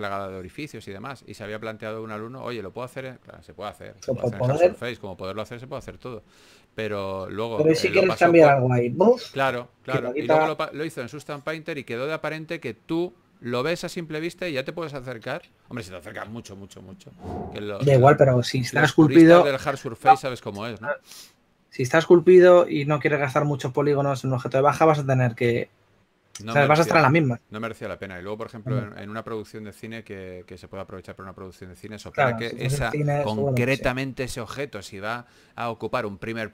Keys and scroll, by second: 0.0-0.7 typing, 5.5 typing, 11.8 4, 17.1 4, 28.9 4, 31.6 3, 33.7-34.5 typing.